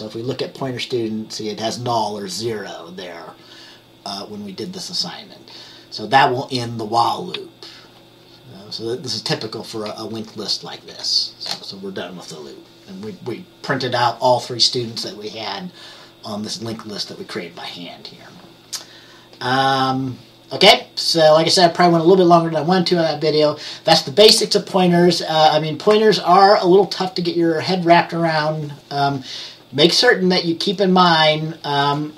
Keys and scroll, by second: 5.6 F10, 9.9 F10, 10.9 F10.